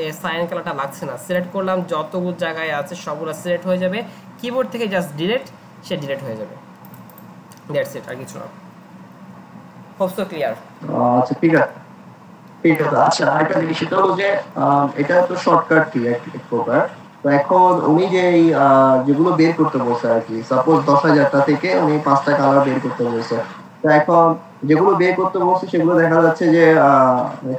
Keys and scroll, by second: 5.4 Delete, 8.1 alt+Tab.